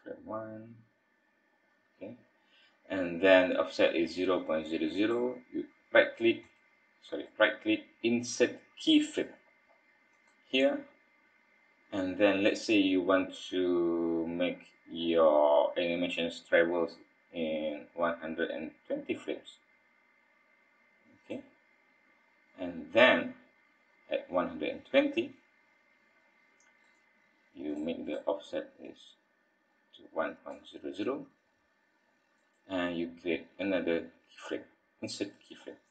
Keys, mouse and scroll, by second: 5.0 click, 7.1 right click, 17.7 click, 26.8 click, 28.8 click, 32.3 right click.